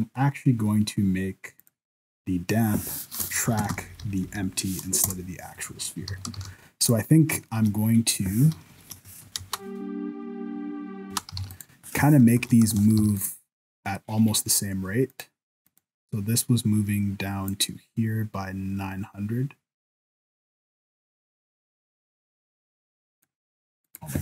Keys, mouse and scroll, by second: 1.6 click, 3.6 Down, 3.7 Down, 4.0 Down, 4.1 Down, 4.2 Down, 6.1 alt+a, 6.4 ctrl+s, 6.8 right click, 7.2 scroll up 3, 7.5 shift+middle click, 7.7-8.4 scroll down 1, 8.4 scroll down 2, 8.7 shift+Left, 9.2 alt+a, 9.4 space, 11.1 space, 11.4 alt+a, 11.5 right click, 12.4 shift+Left, 12.7 ctrl+s, 13.0 alt+a, 13.2 right click, 13.6-14.4 scroll up 1, 15.1 right click, 15.7 right click, 17.5 click, 23.8 click.